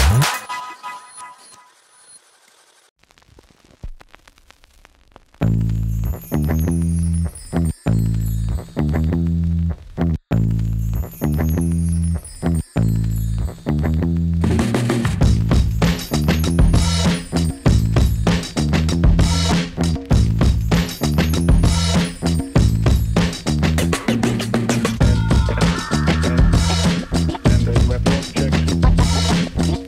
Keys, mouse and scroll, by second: 2.6 scroll down 1, 3.2 click, 4.5-5.4 drag, 11.1-11.7 shift+drag, 12.7-15.5 drag, 18.1-18.6 scroll down 2, 19.0-20.2 drag.